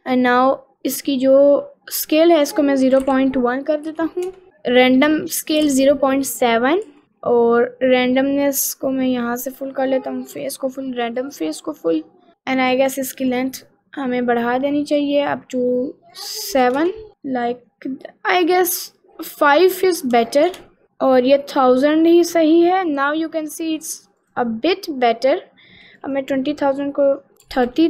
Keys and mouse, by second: 2.5-4.3 drag, 5.4-7.0 drag, 8.9 click, 10.0 click, 11.3 click, 12.3 middle click, 13.5-15.1 drag, 16.3 click, 17.2 middle click, 19.9 click, 21.3 middle click, 21.7-22.8 middle drag, 22.8 middle click, 23.6 middle click, 24.2 click, 26.1-27.8 drag, 27.7 0.